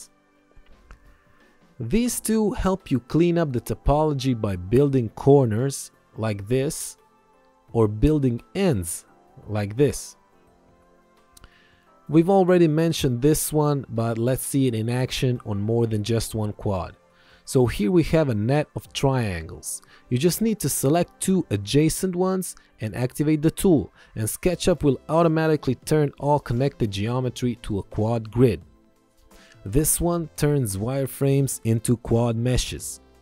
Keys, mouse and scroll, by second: 5.7 ctrl+click, 6.2 click, 8.2 ctrl+click, 9.6 click, 13.6 click, 14.1 ctrl+click, 18.7 click, 21.2 ctrl+click, 23.4 click, 29.9 click, 32.6 Return.